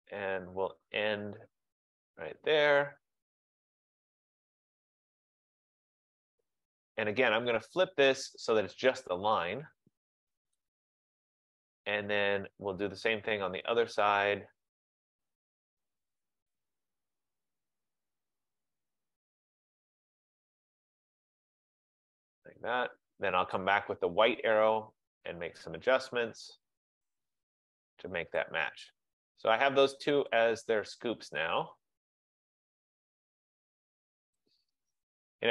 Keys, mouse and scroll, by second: 2.2 click, 6.0 click, 8.4 click, 10.9 click, 11.8 click, 14.3 click, 19.5 click, 22.1 click, 23.6 click, 28.5 click, 30.4 click, 31.5 click, 34.4 click.